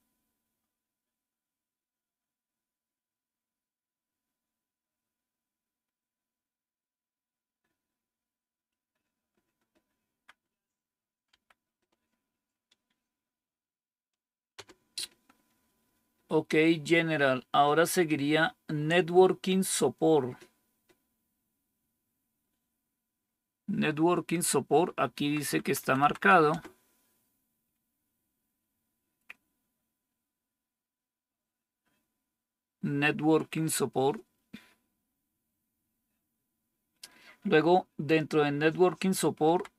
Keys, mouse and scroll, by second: 8.0 Up, 8.7 Up, 8.8-9.9 Up, 11.2 Tab, 11.4 Right, 14.5 Return, 25.2 Down, 25.4 Down, 25.5 Down, 25.7 Down, 25.9 Down, 26.4 Return, 39.3 Down.